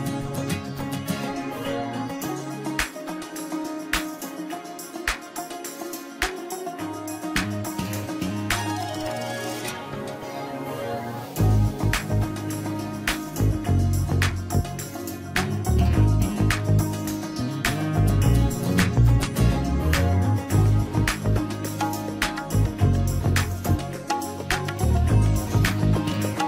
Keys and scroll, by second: 3.5 ctrl+space, 6.9 ctrl+space, 14.7 ctrl+z, 18.9 ctrl+z.